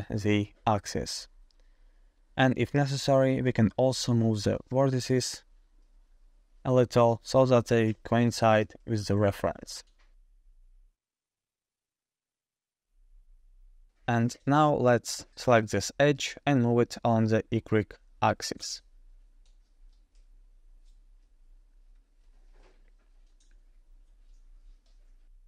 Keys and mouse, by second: 1.6-2.0 shift+middle drag, 2.9-3.3 shift+middle drag, 3.3 Tab, 4.4-5.7 drag, 5.8 1, 7.3 g, 11.0 g, 13.1 shift+click, 13.2 shift+middle click, 13.3 shift+click, 14.0 shift+middle click, 14.6 ctrl+middle click, 15.9 2, 16.2 click, 16.8 shift+middle click, 17.8 shift+middle click, 18.1 shift+click, 19.0 g, 23.3 click.